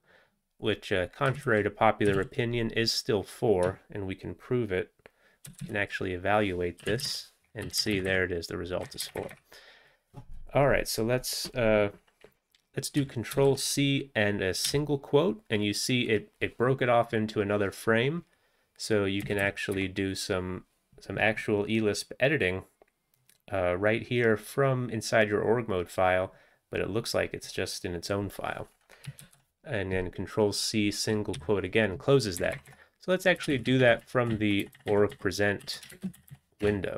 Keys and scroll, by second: 1.4 ctrl+a, 2.2 ctrl+e, 6.8-7.6 typing, 7.8 Return, 8.0 Down, 8.1 Down, 8.7-9.4 typing, 13.4 ctrl+c, 14.7 ', 19.3 Down, 19.4 Down, 19.7 Up, 29.3 ctrl+c, 31.4 ', 32.4 Up, 32.6 Up, 32.7 Up, 33.5 Left, 33.5 Left, 33.7 Left, 34.1 Left, 34.3 Down, 34.7 Down, 34.8 Down, 34.9 Down, 35.7 Right, 35.9 ctrl+space, 36.2 Down, 36.3 Down, 36.6 BackSpace.